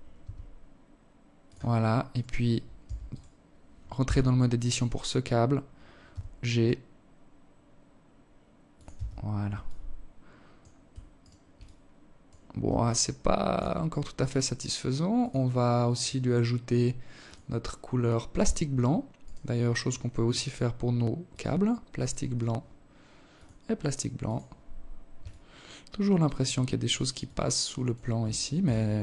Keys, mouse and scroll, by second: 0.5 right click, 1.2 Tab, 1.5 right click, 2.4 Tab, 4.6 g, 7.4 Tab, 8.0 alt+click, 9.6 right click, 10.0 alt+click, 11.2 alt+shift+click, 13.6 click, 14.4 click, 17.6 right click, 18.7 click, 20.7 right click, 21.8 click, 23.7 alt+click, 25.7 alt+click, 26.7 alt+shift+click, 27.3-27.7 scroll up 6, 28.4 scroll up 3.